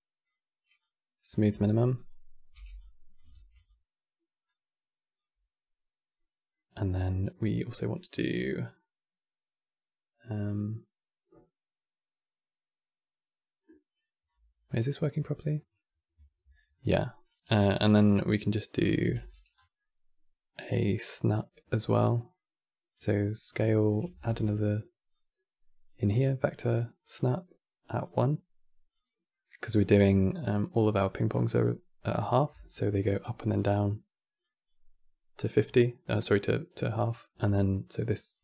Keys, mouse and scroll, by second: 1.3-1.6 middle drag, 1.6 click, 2.2 g, 2.9 click, 3.0 shift+d, 4.1 click, 5.8-9.0 middle drag, 14.3-15.0 middle drag, 15.0-15.3 scroll up 3, 15.6 scroll down 1, 16.5-17.8 middle drag, 17.8 drag, 18.7 g, 19.3 scroll down 4, 19.5-22.6 middle drag, 22.6 click, 23.2 click, 23.6 click, 23.8 shift+d, 24.8 click, 25.9-29.0 drag, 29.0 middle click, 29.5 click, 32.2-38.4 typing, 32.4 click, 34.1 click, 35.1 click, 35.7 click, 36.6 middle click, 37.8 click.